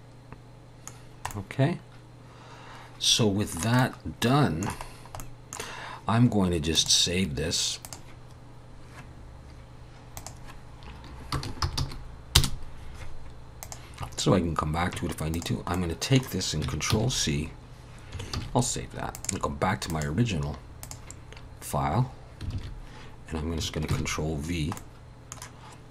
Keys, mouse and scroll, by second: 1.0-1.3 scroll down 2, 1.3 middle click, 3.8 middle click, 4.9 scroll down 1, 5.2 middle click, 6.8 click, 15.3 click, 15.8 middle click, 16.9 ctrl+c, 18.4 ctrl+s, 19.1 click.